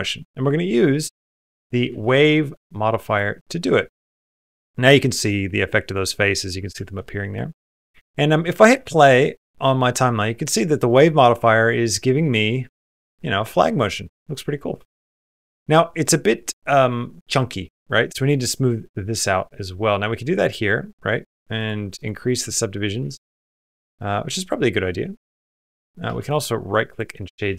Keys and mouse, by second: 0.9-3.0 drag, 5.0 middle click, 5.8 middle click, 6.6 shift+middle click, 8.5 space, 9.4 middle click, 9.9 middle click, 10.7 middle click, 11.2-12.6 middle drag, 13.6 middle click, 14.0 middle click, 14.5 space, 15.9 middle click, 21.4 click, 21.8 click, 22.5 middle click, 23.3 middle click, 23.3 space, 23.9-25.7 middle drag, 26.0 space, 26.3 click, 27.0 middle click.